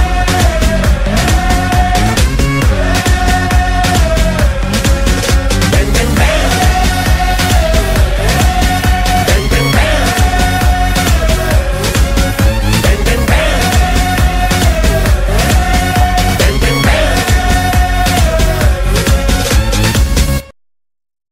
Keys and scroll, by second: 0.9 space, 1.9 space, 9.4 ctrl+z, 9.6 ctrl+z, 10.5 ctrl+z, 11.9 space, 12.3 ctrl+z, 15.1 space.